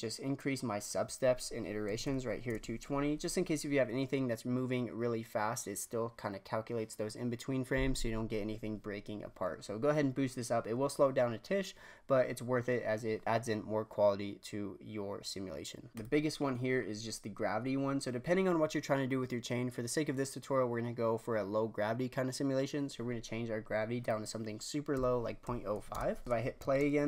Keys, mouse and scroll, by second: 0.3-3.3 drag, 15.9-16.4 drag, 16.4-17.3 scroll down 5, 24.0-26.2 drag, 26.2 shift+Left, 26.6 shift+space.